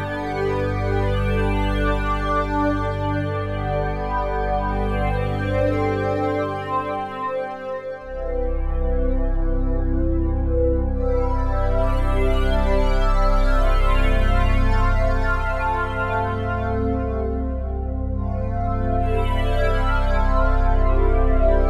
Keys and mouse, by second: 0.9 alt+shift+click, 1.8 click, 3.4 click, 5.9 click, 6.3 click, 7.4 typing, 8.7 click, 9.6-12.1 drag, 15.1-21.6 drag.